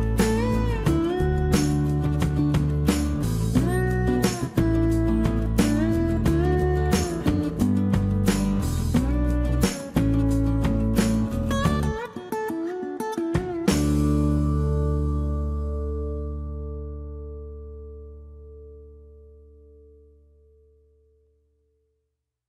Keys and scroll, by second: 10.9 Escape, 13.6 Escape, 15.2 Escape, 18.5 m, 20.4 space, 20.5 Escape, 21.8 Escape.